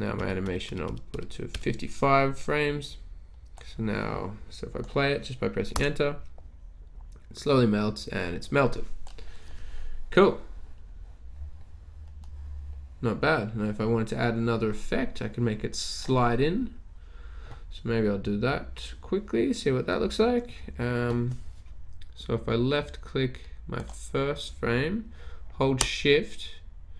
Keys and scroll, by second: 0.0-1.4 typing, 0.2 F5, 0.9 F5, 5.8 Return.